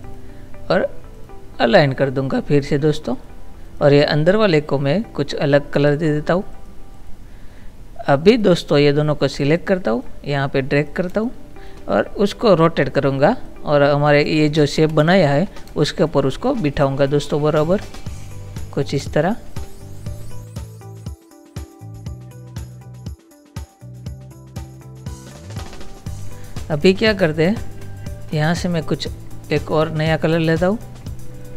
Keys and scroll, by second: 11.1 space, 14.8 ctrl++, 15.7 space, 19.0 space, 20.5 Down, 20.9 Down, 21.0 Right, 21.1 Up, 21.4 Down, 21.8 Up, 22.0 Up, 22.2 Up, 22.3 Down, 22.5 space, 22.6 Up, 22.7 space, 22.8 Down, 23.3 space, 23.4 Left, 23.6 ctrl+-, 23.7 space, 24.3 Up, 24.7 Left, 25.1 Left, 25.6 Left, 27.2 space.